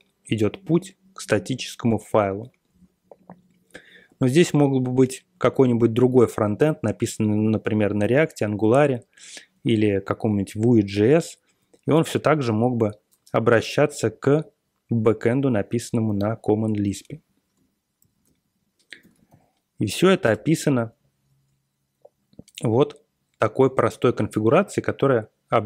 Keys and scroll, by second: 17.9 ctrl+super+l, 19.0 ctrl+x, 20.2 Return, 20.9-21.7 Page_Down, 22.6 Down, 22.9 Down, 23.2 Down.